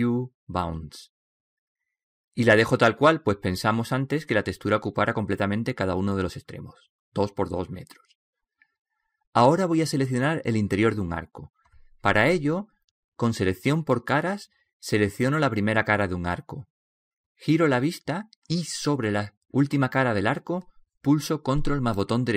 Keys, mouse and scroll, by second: 0.7 middle click, 0.8 u, 2.9-9.5 middle drag, 9.5 right click, 15.6 right click.